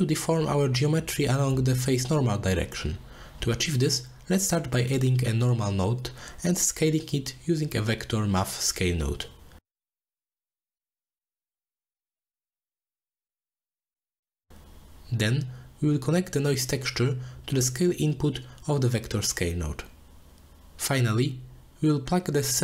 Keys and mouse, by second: 2.3 click, 2.8-3.2 drag, 3.5 click, 4.2 middle click, 4.9 middle click, 5.5 shift+a, 10.0 shift+click, 10.5 drag, 10.8 g, 11.8 click, 13.1 click, 13.4 click, 13.8-17.2 middle drag, 17.6 middle click, 18.3-20.1 middle drag, 21.8 middle click.